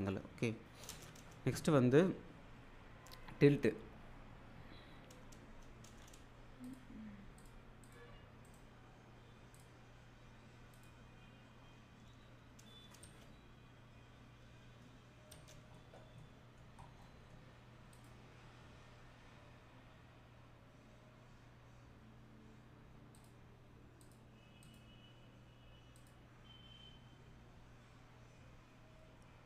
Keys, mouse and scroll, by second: 0.9 space, 6.6 space, 6.7 click, 8.4 right click, 9.5 click, 12.1 w, 13.0 space, 15.3 space, 15.8-16.8 alt+middle click, 16.8 scroll, 17.0 middle click, 17.9 click, 23.1 click, 26.0 click.